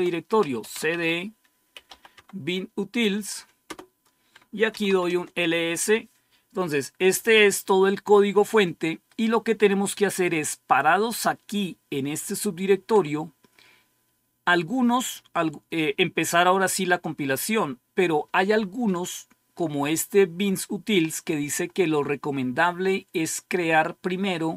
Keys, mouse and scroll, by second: 0.0-2.2 typing, 3.5 Return, 4.3-5.1 typing.